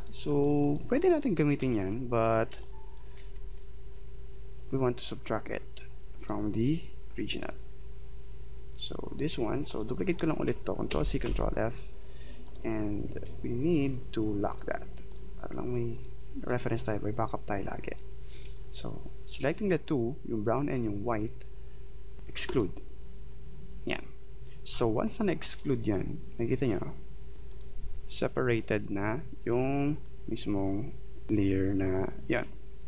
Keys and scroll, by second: 1.6 space, 10.9 ctrl+c, 11.5 ctrl+f.